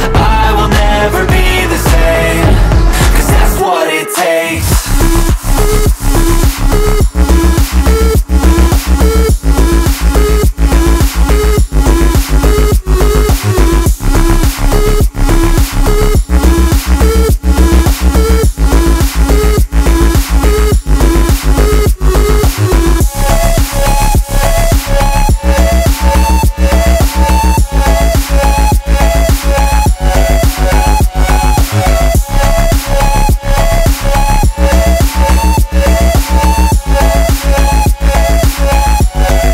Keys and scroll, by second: 2.9 b, 3.7 z, 5.9 space, 7.3 b, 10.0 [, 12.7 ], 16.0 5, 19.8 3, 20.2 ], 23.3 [, 25.0 [, 26.2 ], 28.3 space, 33.1 0, 33.4 [, 35.2 ], 36.2 ], 38.9 z.